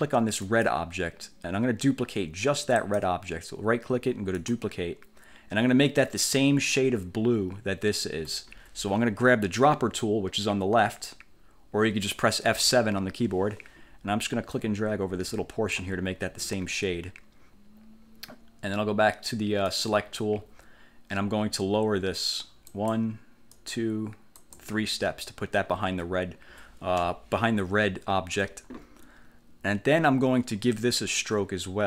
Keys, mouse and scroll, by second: 0.5 click, 2.9 click, 4.5 click, 6.6-6.9 ctrl+scroll up 2, 12.7 F7, 14.7-16.1 drag, 19.8 click, 22.9 click, 23.7 click, 24.5 click, 27.1 1.